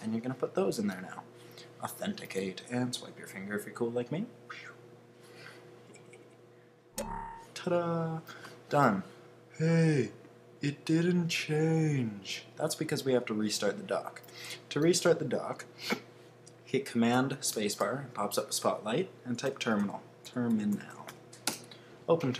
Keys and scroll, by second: 19.2-21.5 typing.